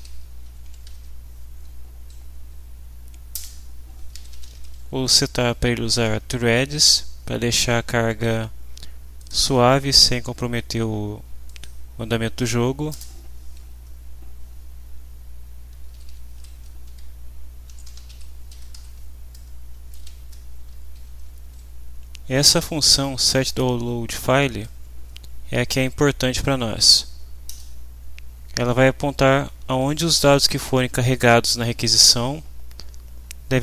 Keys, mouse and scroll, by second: 0.0-0.9 typing, 3.3 Return, 3.9-5.0 typing, 5.1 End, 9.2 click, 11.4 click, 12.9 Return, 15.4-19.3 typing, 21.0 Down, 27.5 Return.